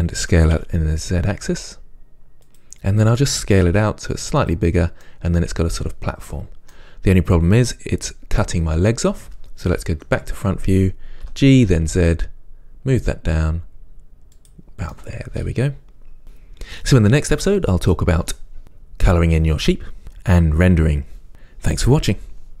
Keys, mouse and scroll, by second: 0.6-2.7 drag, 0.6 s, 3.8 s, 4.7 click, 5.2-22.6 middle drag, 10.1 KP_1, 11.5 g.